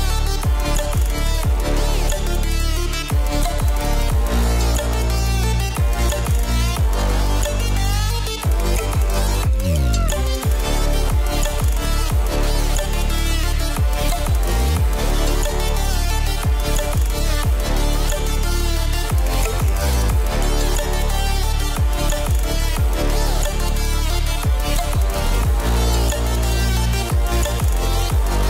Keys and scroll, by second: 18.2 ctrl+v, 19.9 ctrl+t, 26.7 ctrl+t.